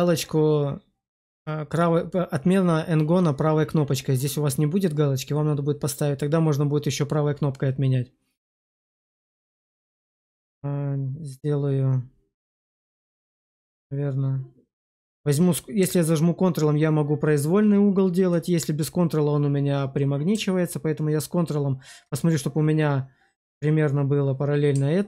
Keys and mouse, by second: 9.1 drag.